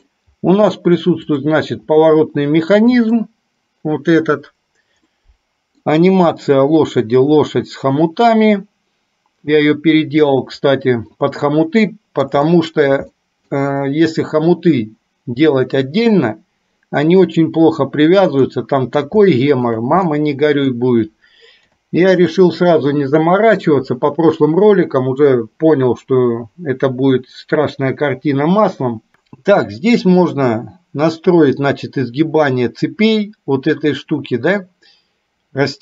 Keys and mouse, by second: 1.3 click, 2.2-3.3 middle drag, 5.2-5.9 middle drag, 11.9-12.3 middle drag, 12.6-13.1 shift+middle drag, 13.2-13.6 middle drag, 18.6-19.1 middle drag, 19.3-19.8 shift+middle drag, 20.2-20.8 middle drag, 21.7 KP_8, 22.4 KP_7.